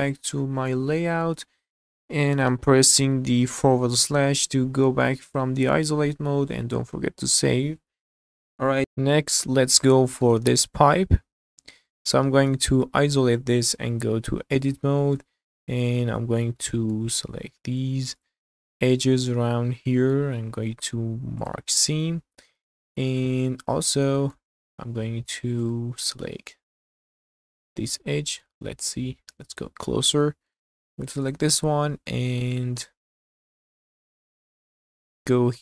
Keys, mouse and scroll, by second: 0.7-1.3 middle drag, 3.8 /, 5.7 scroll down 1, 5.8 middle click, 9.8-10.3 middle drag, 10.7 click, 11.5 middle click, 12.5 /, 13.7 Tab, 14.6 shift+middle click, 15.4-16.1 scroll up 4, 16.2 shift+middle click, 16.6 middle click, 17.4 2, 18.2 alt+click, 19.1-20.2 middle drag, 20.7 q, 22.0 middle click, 22.8 shift+middle click, 23.6-24.0 scroll up 2, 24.0 shift+middle click, 25.4-25.7 scroll up 1, 25.7 shift+middle click, 27.4 click, 27.9 scroll up 1, 28.2 shift+middle click, 28.6 middle click, 29.1-29.7 scroll up 1, 29.7 scroll up 2, 30.2 shift+middle click, 31.2 click, 31.6-32.3 scroll down 3, 32.3-33.9 middle drag, 34.0-34.3 scroll up 2, 34.6 middle click, 35.0 scroll up 3.